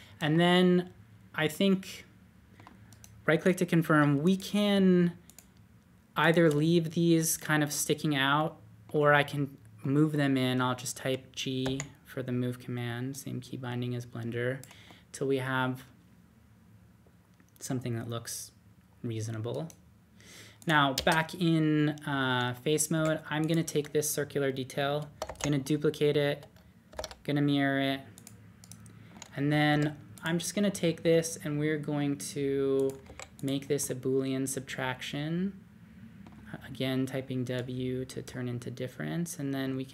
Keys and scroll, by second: 11.6 g, 20.9 typing, 22.9 typing, 25.2 shift+d, 26.9 alt+x, 29.7 typing, 31.0 typing, 33.0 typing, 39.6 typing.